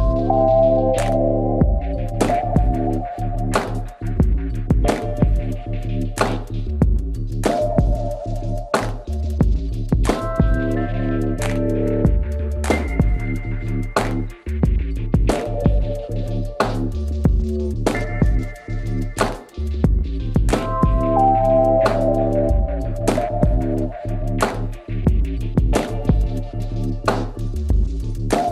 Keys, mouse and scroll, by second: 5.6-7.4 right drag, 6.2 e, 7.4 z, 9.2-11.0 drag, 11.4 Return, 11.7 KP_3, 14.5 x, 16.7 Tab, 17.2 z, 18.2 Tab, 22.3-25.1 middle drag, 25.9 ctrl+r.